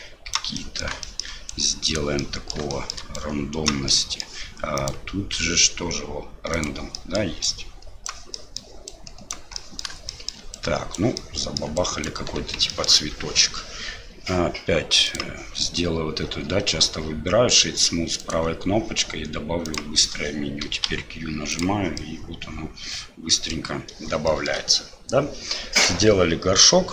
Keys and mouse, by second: 0.3 click, 0.7 click, 1.1 shift+click, 1.5 click, 2.3 click, 2.8 shift+click, 3.1 right click, 3.9 middle click, 4.9-6.8 right drag, 6.9 middle click, 7.4 right click, 8.4 middle click, 8.9 right click, 9.7 middle click, 10.2 shift+click, 10.5 right click, 11.2 click, 11.8 right click, 12.0 click, 12.8 click, 13.0 Tab, 15.1-20.1 right drag, 20.8 q, 21.9-23.5 middle drag, 24.2 shift+middle click, 25.8-26.9 drag.